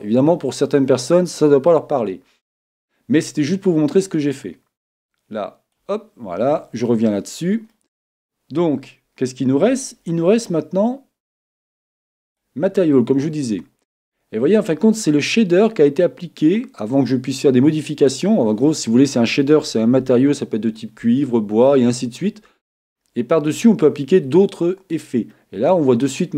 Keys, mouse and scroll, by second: 5.1-7.0 drag, 6.3-8.7 middle drag, 9.9-11.8 drag, 13.7-18.8 middle drag, 25.3-26.3 middle drag.